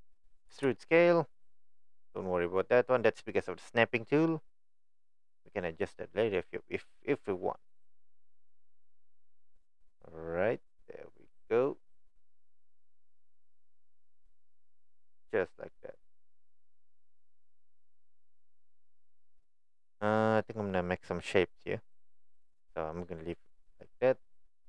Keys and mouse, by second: 23.6 middle click, 24.5 middle click.